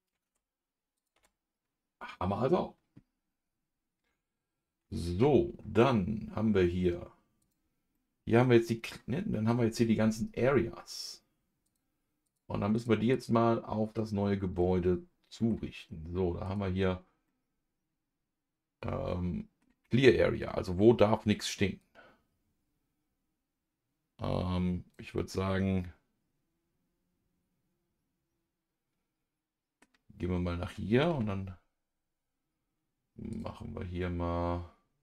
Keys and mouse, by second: 0.3 Tab, 0.9 click, 1.1 Tab, 5.1 n, 7.4 click, 7.9-9.0 middle drag, 11.6 click, 12.2 click, 12.7 click, 13.1 click, 13.9 click, 14.6-16.4 middle drag, 16.4 click, 17.2-19.6 middle drag, 21.8-25.1 drag, 25.1-29.8 middle drag, 31.1 n, 33.3 click.